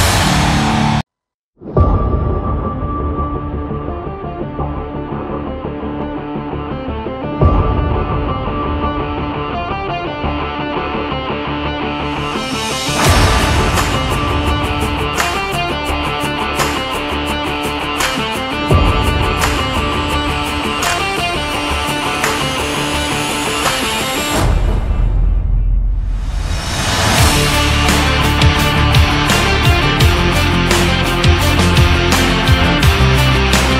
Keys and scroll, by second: 12.7 ctrl+z, 14.6 v, 29.0 v.